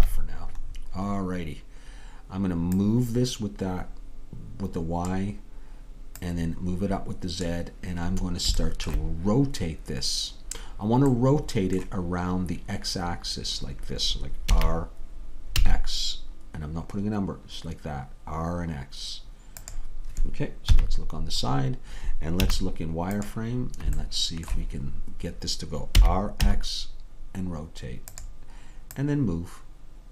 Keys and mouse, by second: 0.0 KP_3, 6.2-8.1 drag, 8.2-14.6 middle drag, 14.6 r, 20.7 KP_3, 22.5 z, 26.0 r, 29.0-30.1 drag.